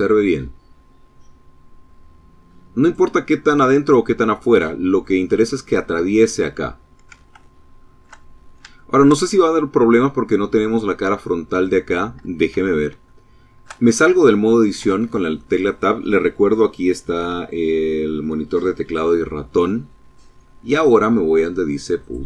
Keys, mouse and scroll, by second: 1.6 click, 1.9-3.9 middle drag, 5.1 middle click, 6.0 shift+middle click, 7.1 shift+scroll up 2, 7.5 shift+middle click, 10.5 middle click, 11.8 shift+middle click, 13.7 Tab, 20.8 click.